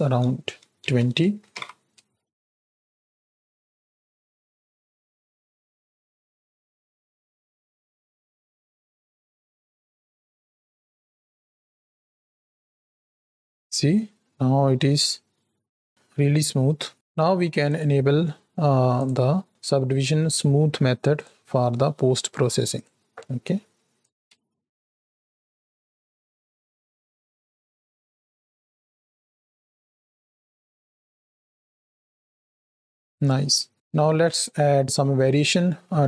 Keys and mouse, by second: 1.4 shift+Right, 1.7 shift+Left, 1.9 space, 16.9 space, 17.6 click, 19.0-21.2 drag, 22.6 click, 23.9 click, 24.3 space, 32.5 space, 34.2 click, 35.6 shift+middle click.